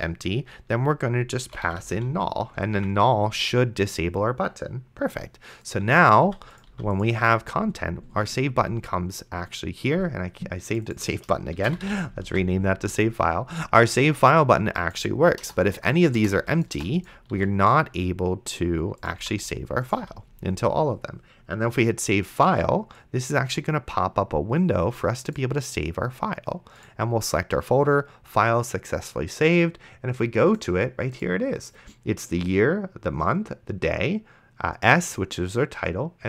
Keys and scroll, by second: 1.2-2.3 typing, 3.0 ctrl+s, 6.2 d, 11.4-12.4 typing, 12.5 ctrl+s, 15.4 BackSpace, 17.3 s.